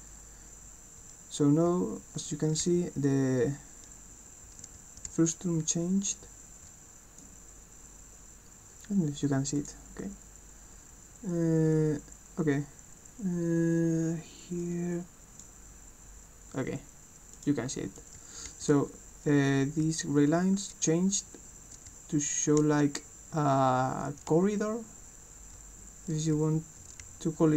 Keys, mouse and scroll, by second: 0.0-0.3 typing, 1.7-3.3 typing, 4.8 w, 5.0 d, 9.5 click, 14.6 click, 17.4 click, 18.0-20.3 typing, 18.0-27.5 right drag, 21.8 w, 22.6 d, 24.3 a, 25.5 w, 27.0 d.